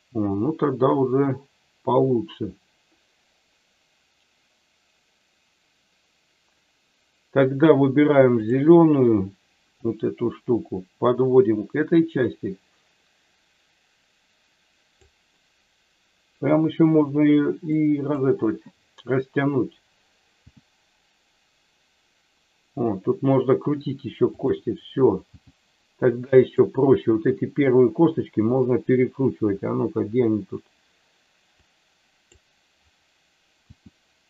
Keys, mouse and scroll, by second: 8.4 click, 9.7-14.9 drag, 17.8 click, 20.4 r, 24.3 click, 25.3 g, 26.4 click, 31.6 click, 33.7 r.